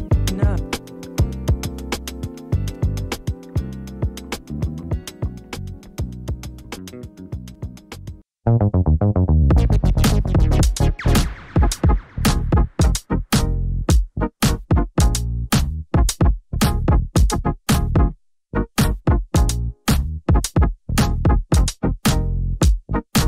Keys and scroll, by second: 4.2-5.1 typing.